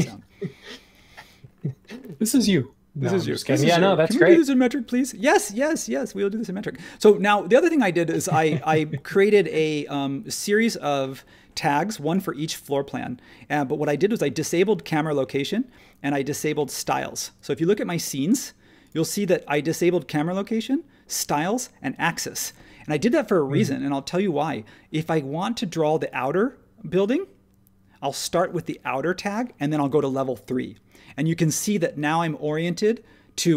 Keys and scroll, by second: 1.2 space.